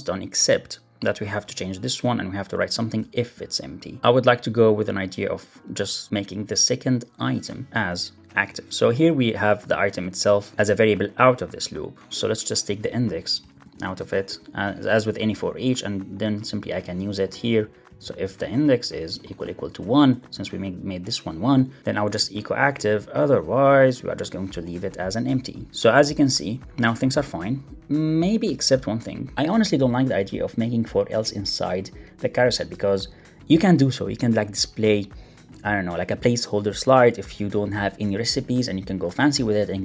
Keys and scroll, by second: 14.3 alt+Left, 14.7 alt+shift+Right, 15.1 super+c, 17.4 Left, 17.9 alt+Left, 18.5 super+v, 21.7 Right, 21.8 super+z, 22.4 super+Right, 22.6 Left, 24.5 super+s, 24.7 alt+super+l, 24.8 super+s.